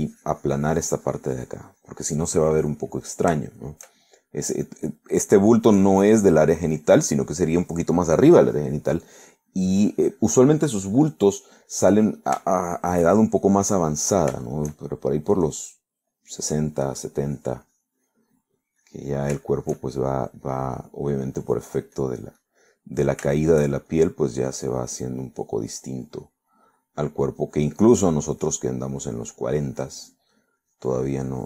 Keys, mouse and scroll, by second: 0.6-4.0 drag, 4.0 middle click, 4.9 shift+middle click, 5.4 middle click, 7.3-8.6 drag, 9.3-12.4 drag, 12.4 middle click, 13.5 shift+middle click, 14.6 click, 15.0 click, 15.5 shift+middle click, 16.7 click, 17.2 middle click, 17.9-20.4 drag, 20.5 shift+middle click, 21.5 shift+middle click, 22.5-24.4 drag, 25.0-26.1 shift+drag, 26.2 shift+middle click, 26.9-30.3 drag, 30.6 click.